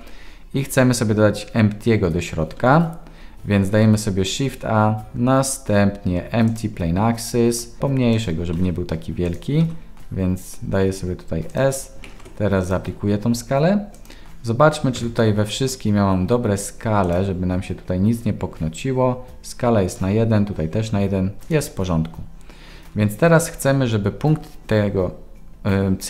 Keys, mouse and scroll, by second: 2.6 ctrl+s, 3.8 shift+a, 7.8 s, 8.5 s, 12.0 ctrl+a, 13.9 click, 15.0 n, 17.1 click, 21.4 click.